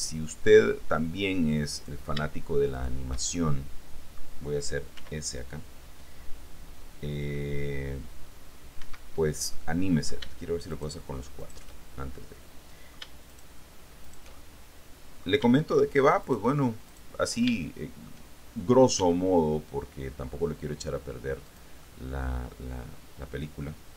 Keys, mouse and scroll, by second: 2.0 right click, 2.1 middle click, 2.2 shift+right click, 2.9 shift+middle click, 3.5-4.5 shift+middle drag, 5.1 s, 9.0 Escape, 9.7 middle click, 10.9 shift+right click, 11.6 shift+right click, 12.0-13.3 shift+middle drag, 13.4 shift+right click, 14.2 shift+right click, 14.5-15.6 shift+middle drag, 16.4 shift+right click, 17.1 shift+right click, 17.7 shift+middle click, 19.2 s, 21.6 click, 22.6-23.8 middle drag.